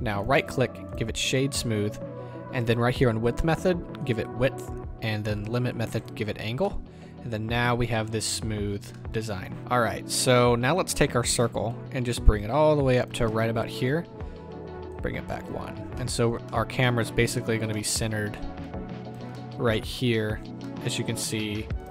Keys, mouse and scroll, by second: 0.2-4.0 right drag, 4.0 click, 6.0 click, 6.6-11.7 middle drag, 9.6-11.7 scroll down 2, 11.7-13.4 ctrl+drag, 13.2 scroll up 2, 13.4-14.9 middle drag, 14.0-14.9 scroll up 2, 14.9-16.0 ctrl+drag, 15.7-16.0 scroll up 2, 16.0-18.6 middle drag, 16.1-16.5 drag, 16.1-16.5 right drag, 18.6 ctrl+click, 19.3 scroll up 2, 19.3 middle click, 20.0-20.5 scroll down 2, 20.5 scroll up 2, 20.6-21.9 middle drag.